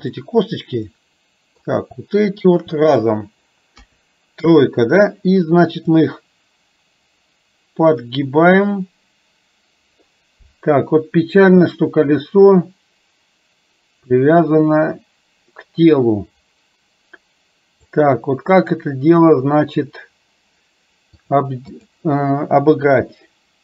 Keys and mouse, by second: 0.3-1.8 middle drag, 2.5 shift+click, 3.8 KP_3, 6.2-18.0 drag, 21.1 click, 22.9 KP_3.